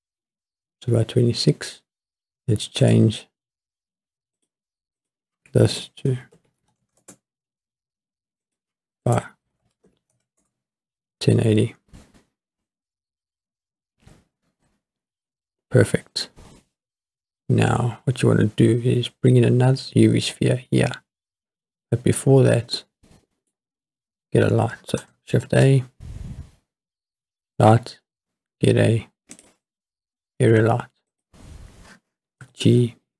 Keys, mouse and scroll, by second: 2.8 click, 4.4 drag, 5.0-7.0 drag, 8.4-10.4 drag, 14.3-15.3 scroll up 3, 15.3-16.0 scroll down 1, 22.8-23.5 middle drag, 23.5-25.1 scroll down 4, 25.4 shift+a, 31.1-32.4 drag, 32.4 g, 32.6 middle click.